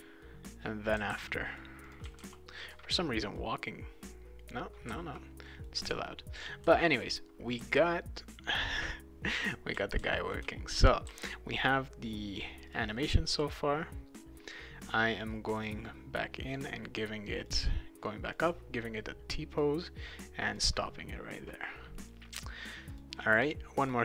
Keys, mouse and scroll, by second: 0.2-1.6 right drag, 0.7-2.7 typing, 1.8 click, 2.1-3.3 right drag, 4.4-5.6 right drag, 4.9 d, 6.5-11.6 right drag, 6.6 a, 7.6 d, 9.5-11.0 typing, 12.7 click, 15.6 click, 17.4 click, 18.3-19.6 drag, 20.4 click, 21.1 right click, 22.9 click, 23.8 click.